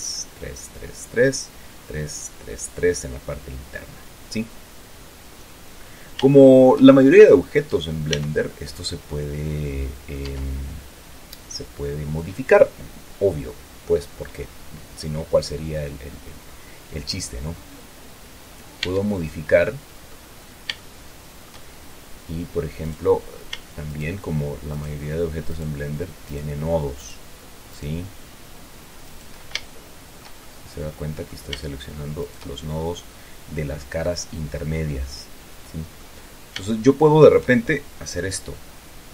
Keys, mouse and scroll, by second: 3.2-6.0 drag, 6.0-6.7 scroll up 1, 6.7-8.4 shift+drag, 8.5 Tab, 9.8 click, 10.5 Tab, 16.8-19.0 drag, 19.2 Tab, 19.7-20.7 drag, 21.1 shift+click, 22.0 shift+middle click, 23.2 right click, 24.2 shift+right click, 25.1 shift+right click, 25.8 shift+right click, 26.6 shift+right click, 27.3 shift+right click, 28.0 shift+right click, 29.4 shift+right click, 30.0 shift+click, 30.8-31.8 shift+drag, 31.8 middle click, 32.5 shift+right click, 33.0-33.5 scroll down 1, 33.5-36.5 middle drag, 36.5-37.0 scroll up 1, 37.0 shift+click, 37.7 shift+middle click.